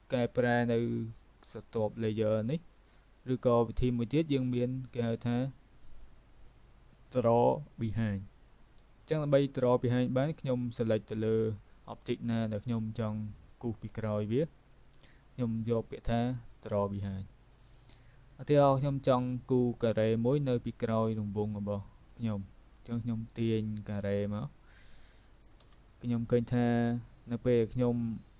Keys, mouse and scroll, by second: 0.0 click, 3.3 click, 10.8 click, 16.7 click, 18.4 click, 22.5 shift+click, 25.5 v, 25.8 click.